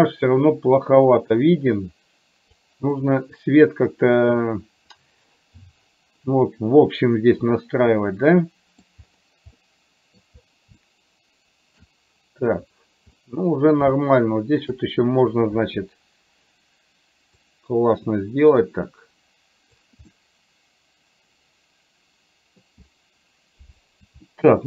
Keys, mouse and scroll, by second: 1.4-2.9 drag, 3.1 middle click, 8.3 middle click, 9.8 middle click, 11.0-12.0 shift+middle drag, 13.4 middle click, 14.3 shift+middle click, 17.6-20.1 drag, 20.3-22.9 middle drag, 24.4 shift+middle click.